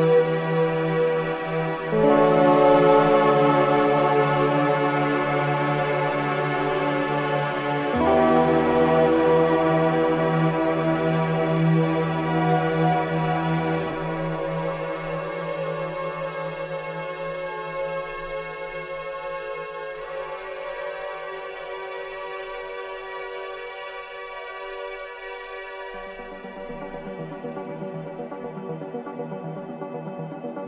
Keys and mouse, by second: 1.7 click, 5.6 a, 6.3 click, 7.8 click, 14.0 click, 15.4 m, 20.9 click, 23.2-25.6 drag, 26.3 click, 28.2 s.